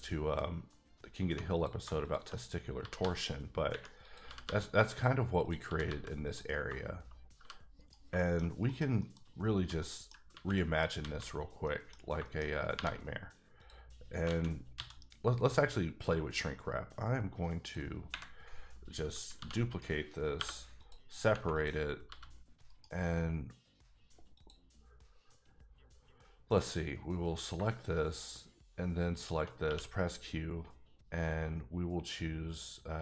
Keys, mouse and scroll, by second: 1.2 1, 1.5 click, 2.8 g, 3.0 g, 4.0 click, 4.2 g, 4.4 g, 4.9 click, 5.4 click, 5.6 g, 5.8 g, 6.2 click, 7.3 g, 7.8 right click, 8.2 shift+middle click, 8.7 KP_Decimal, 8.9 scroll up 1, 9.0 middle click, 9.3-9.8 scroll down 1, 9.8 middle click, 10.3 a, 10.5 middle click, 11.0 alt+a, 11.3-11.6 scroll down 1, 11.6 middle click, 12.7 3, 13.6 click, 14.3 alt+a, 14.7 c, 14.9-16.0 scroll down 6, 15.7-17.9 drag, 19.4 shift+d, 19.7 right click, 20.3 p, 20.8 click, 21.5 click, 22.1 g, 22.7 right click, 24.3 click, 27.4 shift+click, 29.6 q.